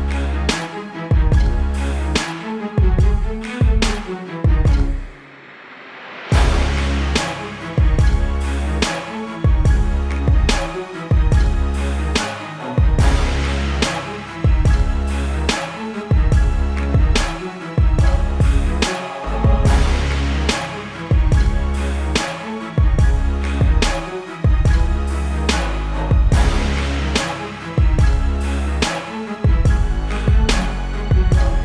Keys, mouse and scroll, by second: 0.5-2.4 typing, 3.5 click, 4.9 ctrl+t, 5.9 click, 7.1 Return, 8.9 t, 16.9 s, 17.2 click, 19.5 ctrl+alt+click, 20.2 click, 21.0-22.4 typing, 22.7 click, 23.8 click, 24.7 KP_Enter, 25.1 ctrl+BackSpace, 25.5 ctrl+t, 26.1 Escape, 26.5 click, 28.0 click, 28.7 ctrl+t, 29.2 click, 29.8 Return, 30.2 t, 30.4 click.